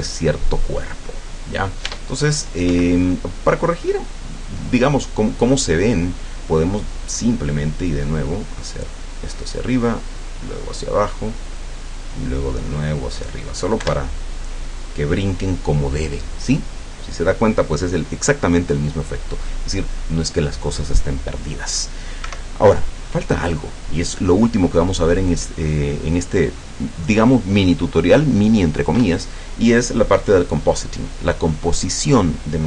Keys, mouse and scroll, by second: 1.9 Tab, 2.7 Escape, 3.6-5.7 middle drag, 7.9-9.8 drag, 10.1-11.7 drag, 11.9-13.3 drag, 13.9 F12, 22.3 Escape.